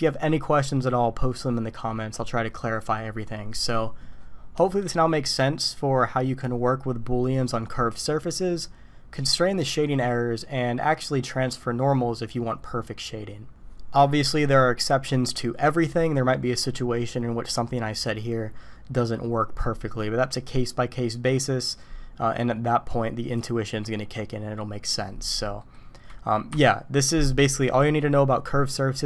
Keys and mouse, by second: 25.6 middle click, 26.5 KP_5.